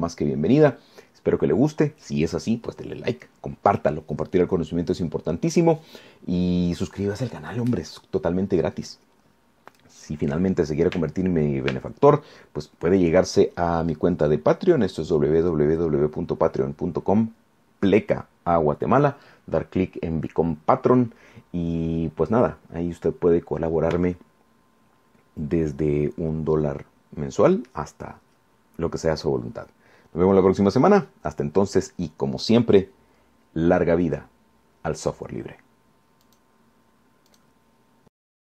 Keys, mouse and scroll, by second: 37.5 click.